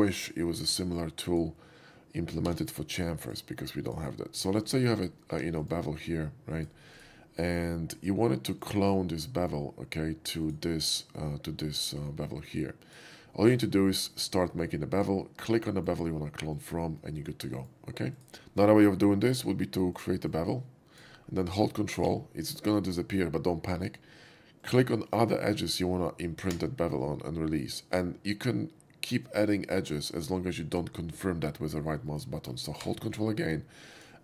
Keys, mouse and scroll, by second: 1.3 click, 2.6 c, 3.3 click, 3.9 click, 4.1 right click, 4.5 shift+middle drag, 5.3 2, 5.6 click, 5.9-6.5 drag, 6.9 right click, 7.4 middle drag, 8.6 click, 9.2-9.5 middle drag, 10.5 click, 11.2-12.9 drag, 14.3-15.1 drag, 15.5-15.9 middle drag, 16.6 click, 17.1-17.7 middle drag, 18.2 right click, 19.9 shift+click, 20.4-21.1 shift+drag, 21.2 middle click, 24.7 ctrl+click, 25.5 ctrl+click, 32.1-32.5 middle drag, 34.0 ctrl+click.